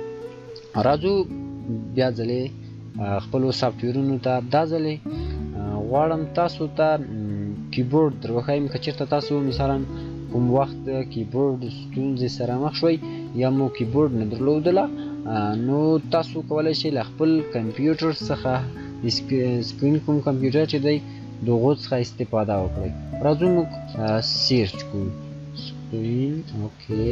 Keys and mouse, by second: 1.6 click, 4.3 click, 19.8 shift+o, 20.1 n, 20.4 space, 22.9 click, 24.5-26.6 typing.